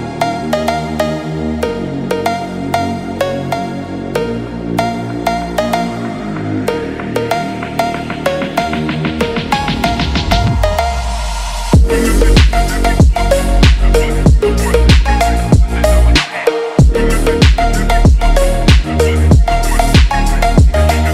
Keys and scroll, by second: 3.3 ctrl+-, 6.8 ctrl+-, 8.1 ctrl+-, 10.2 ctrl+=.